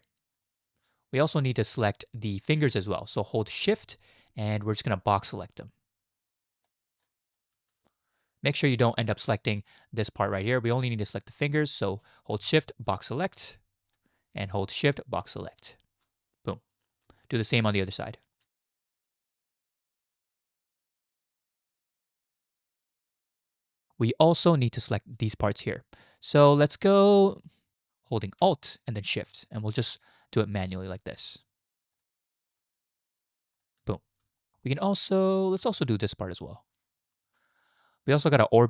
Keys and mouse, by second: 1.3 shift+click, 5.2-7.0 shift+drag, 13.0-14.0 shift+drag, 14.9 shift+click, 17.2-17.6 shift+drag, 18.5 shift+click, 18.8 shift+click, 19.7 alt+shift+click, 20.3 shift+click, 20.6 alt+shift+click, 20.9 shift+click, 21.4 shift+click, 22.1 shift+click, 22.4 shift+click, 22.9 shift+click, 24.6 shift+drag, 26.5-27.5 shift+drag, 27.7-28.0 shift+drag, 31.9 alt+shift+click, 32.5 alt+shift+click, 33.6 alt+shift+click, 34.2 shift+middle click, 35.3 shift+drag, 35.5-35.9 shift+middle drag, 36.4 alt+shift+click, 38.5-38.6 drag.